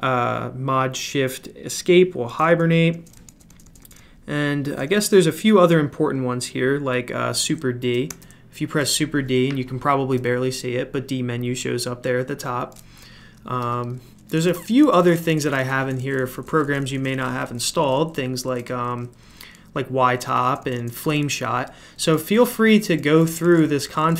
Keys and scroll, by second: 2.3-4.9 typing, 13.6 Escape, 14.3-24.1 typing.